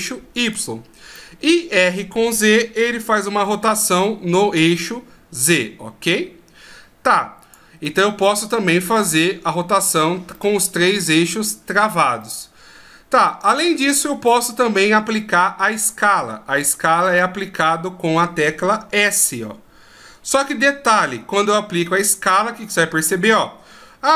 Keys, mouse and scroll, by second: 1.1 middle click, 2.3 r, 7.8 middle click, 10.3 middle click, 17.1 right click, 19.1 s, 23.0 s.